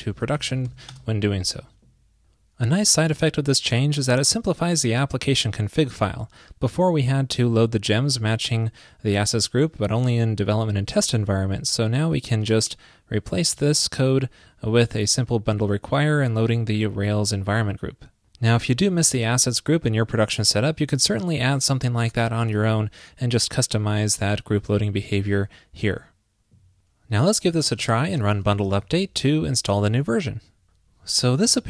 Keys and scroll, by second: 14.1 super+v.